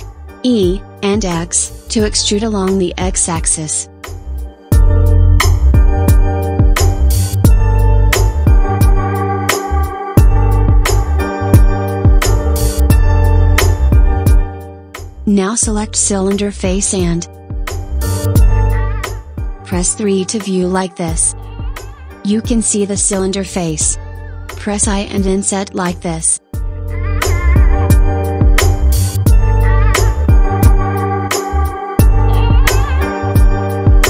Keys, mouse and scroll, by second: 2.0 e, 10.1 Tab, 14.1 click, 15.1 click, 15.8 click, 16.8-20.1 middle drag, 20.3 KP_3, 22.3-23.0 scroll up 3, 23.0 scroll up 1, 24.5 i, 32.5 KP_1.